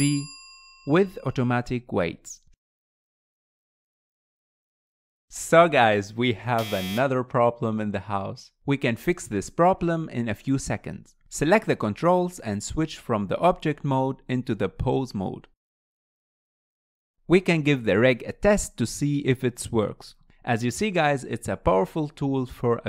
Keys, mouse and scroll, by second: 11.3 click, 12.0 scroll up 2, 12.3 middle click, 13.2 click, 15.5-17.7 drag, 17.7-18.0 scroll down 2, 18.0-19.2 middle drag, 19.2 click, 20.9 r.